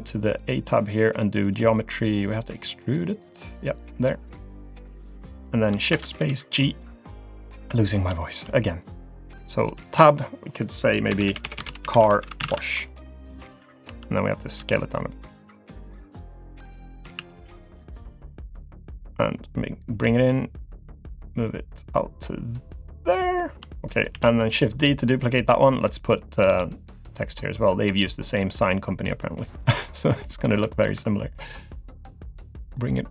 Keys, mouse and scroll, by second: 0.3 click, 1.4 click, 2.3-3.8 scroll down 4, 3.8 click, 3.8-4.5 scroll down 1, 5.9 shift+space, 6.9 click, 7.8 scroll up 2, 8.2 shift+middle click, 8.8 click, 10.0 Tab, 11.1-12.5 typing, 13.9 Tab, 14.6 s, 16.1 click, 17.2 s, 18.6 click, 20.3 click, 21.5 click, 23.4-23.8 scroll down 2, 23.8 shift+middle click, 24.1 shift+d, 25.0 click, 26.3 scroll up 1, 26.9 click, 28.6 middle click, 29.6 click, 30.4-30.7 scroll up 2, 30.7 shift+middle click, 31.0 middle click, 32.5 click.